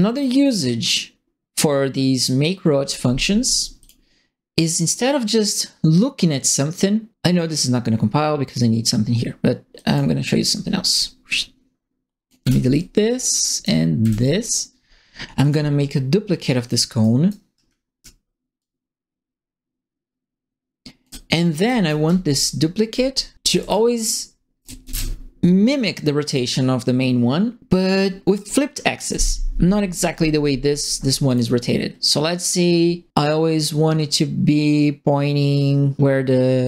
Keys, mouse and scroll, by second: 3.8 click, 9.7 click, 10.9-12.2 drag, 12.4 Delete, 12.7 click, 14.0 Delete, 15.4 click, 16.6 click, 17.0 right click, 18.5-21.0 alt+drag, 21.4-25.3 typing, 21.5 right click, 23.4 right click, 24.6 right click, 26.2 click, 31.2 click.